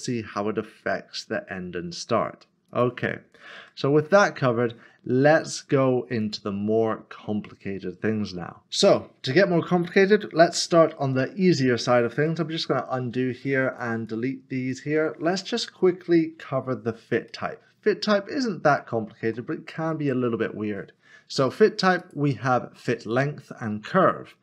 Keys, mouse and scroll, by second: 2.7 click, 3.6 ctrl+z, 4.3 middle click, 6.2 click, 9.8 double click, 11.8 ctrl+z, 13.8 click, 14.4 double click, 14.9 double click, 17.3 middle click, 17.9 middle click, 17.9 scroll up 1, 18.8 shift+middle click, 22.0 shift+middle click.